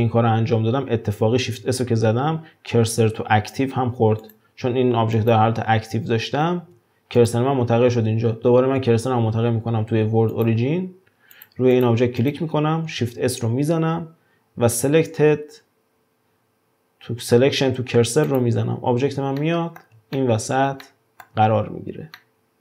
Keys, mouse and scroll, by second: 1.5 shift+s, 5.2 click, 6.4 shift+s, 8.6 shift+s, 11.4 drag, 11.7 click, 12.2 click, 13.1 shift+s, 19.4-21.6 middle drag, 21.6-22.2 scroll up 1, 22.2 middle click.